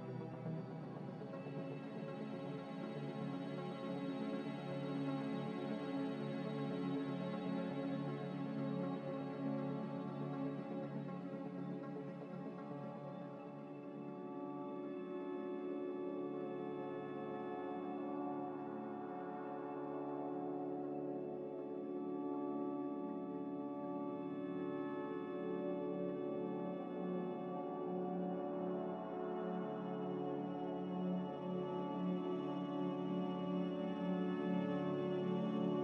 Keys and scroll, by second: 6.4 a, 13.7 ctrl+z, 13.9 ctrl+z, 15.5 1, 19.1 b, 21.4 Delete, 30.1 typing, 31.2 Delete, 31.7 m.